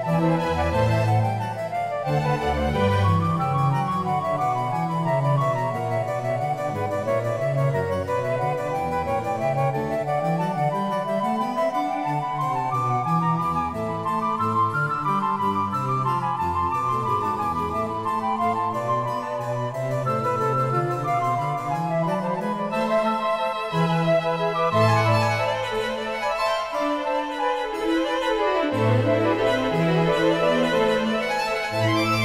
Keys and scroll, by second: 10.4 Return, 12.4 Return.